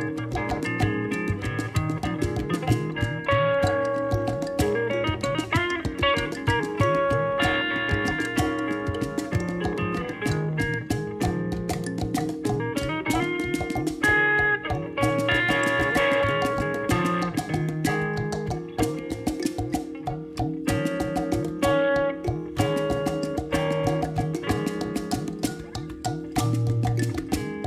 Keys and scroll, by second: 7.5-9.0 typing, 9.5 Return.